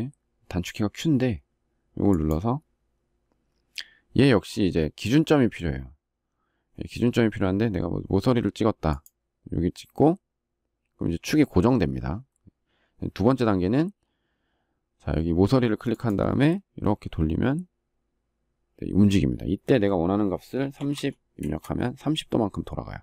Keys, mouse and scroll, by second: 21.1 Return.